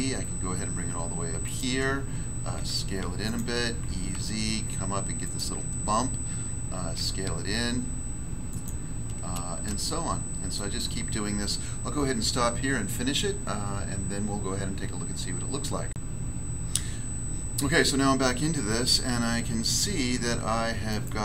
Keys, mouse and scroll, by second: 1.4 click, 2.5 s, 3.2 click, 3.8 e, 4.1 z, 5.2 click, 6.9 s, 8.5 click, 9.1 scroll down 1, 9.8 shift+middle click.